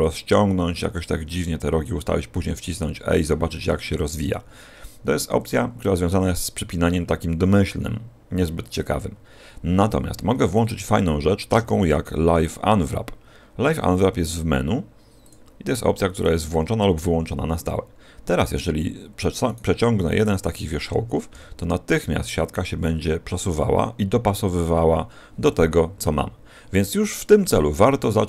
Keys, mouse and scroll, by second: 1.9 e, 12.7 click, 16.1 click, 19.4 right click, 20.1 right click, 21.3 g, 27.7 click.